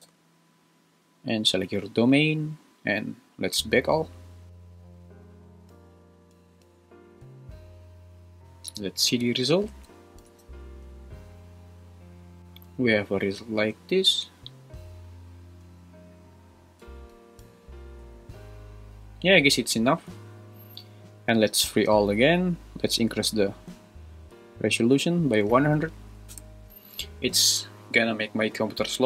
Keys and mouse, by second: 8.3 click, 9.3 shift+Left, 9.7 space, 10.3 space, 12.4 Right, 21.8-22.3 drag, 24.8-26.5 drag, 25.6 0.